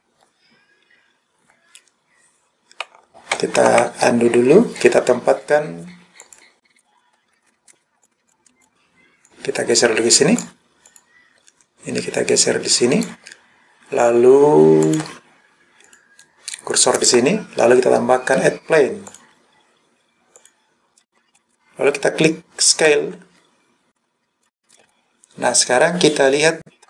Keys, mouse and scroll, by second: 3.6 ctrl+z, 6.3 click, 8.3 click, 8.6 click, 9.3 click, 10.9 click, 12.2 click, 14.9 click, 15.9 click, 19.1-20.5 drag, 23.2 s, 24.4 click.